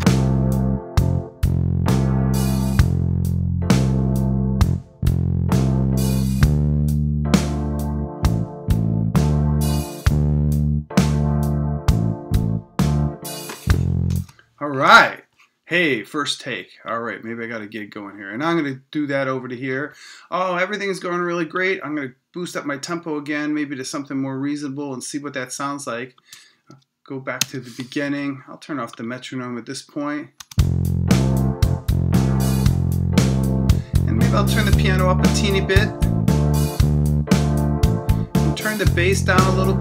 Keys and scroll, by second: 14.1 space.